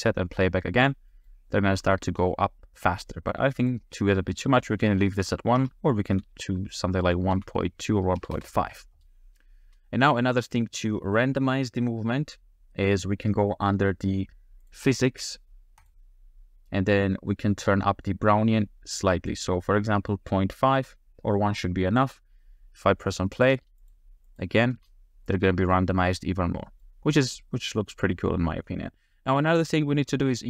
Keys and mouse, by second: 1.1 middle click, 3.6-8.4 drag, 9.6 space, 15.8 click, 19.3-22.0 drag, 23.3 click, 24.4 click, 24.7 space, 26.6 click.